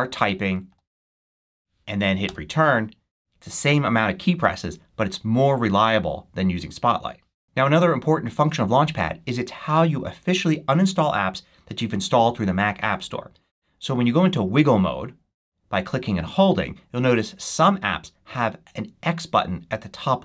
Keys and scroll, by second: 0.0 a, 0.6 l, 1.3 c, 2.2 Return.